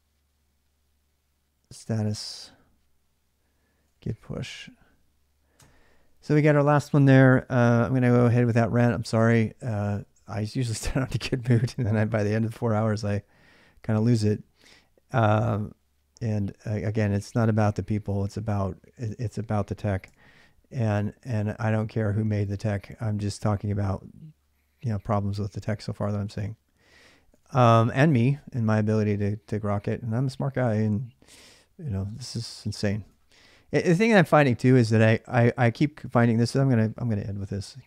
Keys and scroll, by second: 1.2-2.4 typing, 3.4-4.8 typing, 5.4 Return, 12.8 alt+Tab, 14.1 alt+Tab, 19.9 alt+Tab, 26.7 alt+Tab, 27.2 alt+Tab, 32.9 alt+Tab, 33.6 alt+Tab.